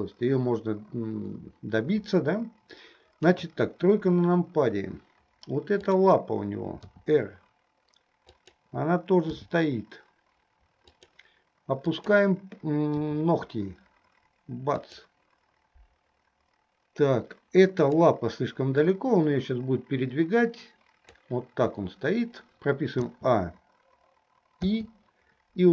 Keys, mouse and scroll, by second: 3.3 KP_3, 5.9-6.3 drag, 7.1 r, 9.7 g, 12.2 click, 13.2 r, 17.9 click, 19.1-21.7 drag, 23.3 a, 24.9 i.